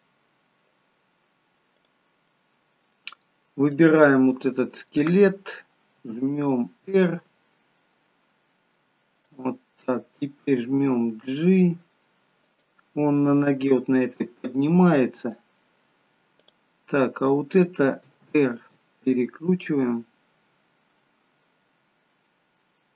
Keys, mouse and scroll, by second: 1.7 click, 2.3 middle click, 3.6 click, 6.0 r, 10.6 g, 13.9 middle click, 16.4 click, 18.0 r.